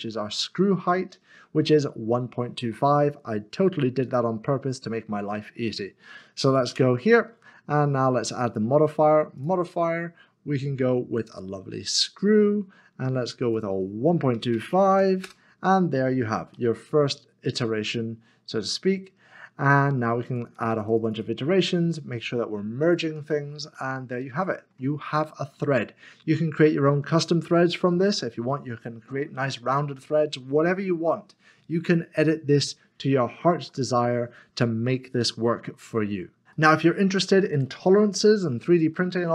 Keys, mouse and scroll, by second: 4.0 click, 6.7 Tab, 8.5 click, 11.9 click, 14.3-14.9 typing, 16.5 middle click, 20.3 scroll down 1, 20.5 double click, 22.8 double click, 23.7 click, 23.9 middle click, 24.9-25.3 scroll down 1, 25.3 middle click, 25.5 scroll down 1, 26.1 middle click, 26.7 shift+middle click, 27.4-27.9 scroll up 1, 27.9 middle click, 31.3 scroll down 1, 32.4-33.7 scroll up 1, 34.0 middle click, 36.5 middle click, 39.1 shift+middle click.